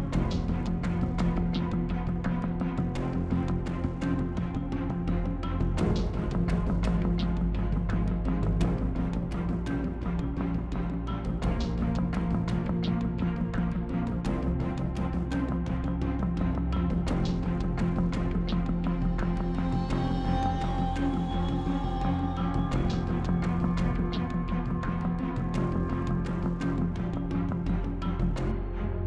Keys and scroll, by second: 19.5 ctrl+t.